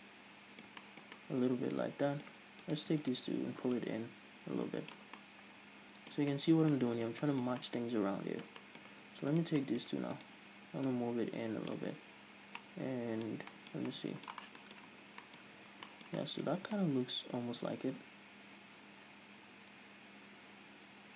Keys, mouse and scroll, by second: 0.0-3.1 middle drag, 3.1 right click, 3.5 shift+right click, 4.2-5.6 drag, 5.6-8.3 middle drag, 8.3-8.9 scroll up 2, 8.9 scroll up 1, 9.1 middle click, 9.8 right click, 10.1 middle click, 10.6 shift+right click, 11.3-13.1 drag, 13.1-15.4 middle drag, 14.9 scroll down 2, 15.4 Tab, 15.5-15.9 middle drag, 15.5 scroll down 2, 15.9 a, 16.3-16.9 shift+middle drag, 16.9 scroll up 2, 17.2-21.1 middle drag.